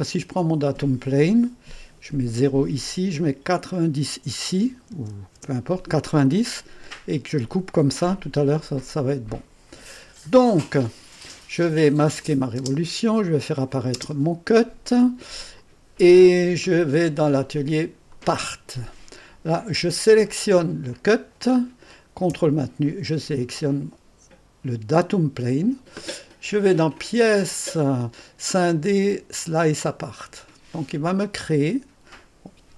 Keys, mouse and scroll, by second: 1.4-2.6 drag, 2.4 0, 3.2-4.7 drag, 4.5-5.4 typing, 6.5 click, 7.5 typing, 8.6-12.6 drag, 12.6 typing, 13.4 click, 14.0 click, 14.0 space, 15.6 click, 17.2-19.2 drag, 17.5 typing, 20.9 click, 21.3 click, 21.3 typing, 24.9 click, 27.2-28.2 drag, 29.7 click.